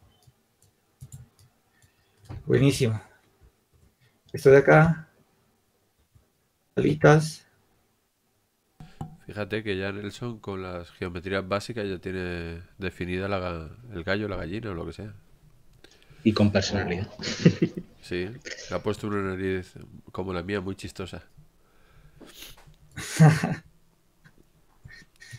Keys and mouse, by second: 2.7 shift+d, 4.3 r, 5.1 click, 6.8 s, 11.1-14.1 drag, 17.9-19.8 drag, 20.6 click, 21.3-25.2 drag, 25.2 right click.